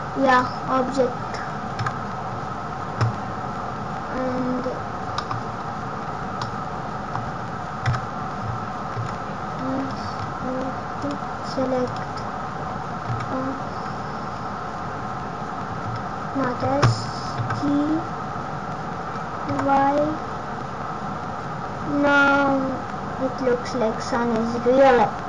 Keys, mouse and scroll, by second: 1.8 KP_0, 3.0-3.8 scroll up 10, 4.0 scroll down 2, 4.6 scroll down 8, 4.9 scroll up 1, 5.1 middle click, 5.3-6.1 scroll down 10, 6.4 middle click, 7.3 scroll up 1, 7.8 KP_0, 8.9 s, 10.9 click, 11.8 click, 17.3 g.